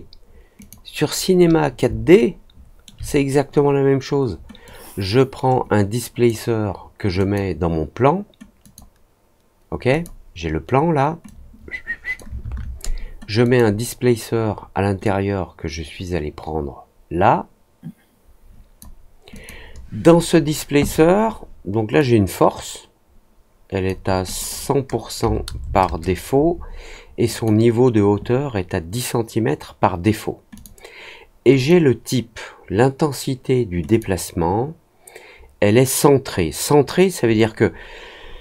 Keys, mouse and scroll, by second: 2.0 alt+middle click, 4.6-6.2 drag, 7.1 click, 8.6 click, 9.8 click, 11.2 click, 13.4 click, 15.0-18.7 drag, 19.3 click, 21.9-23.8 drag, 24.2 click, 27.3 click, 30.5 click, 31.5 click, 33.8 click.